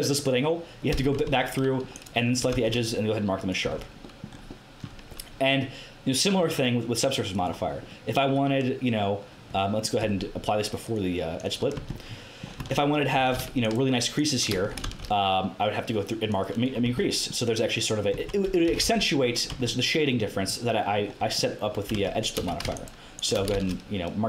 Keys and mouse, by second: 1.2 Tab, 1.2 middle click, 1.9-3.7 drag, 2.5 ctrl+e, 3.6 Tab, 4.2 middle click, 6.2-7.4 drag, 10.0 Tab, 10.8-14.5 drag, 11.7 Tab, 12.6 Tab, 13.1 a, 14.8 ctrl+e, 16.8 Tab, 17.0-18.0 drag, 18.2 Tab, 18.6 g, 19.5 Tab, 21.9 Tab, 22.3 a, 23.5 ctrl+e.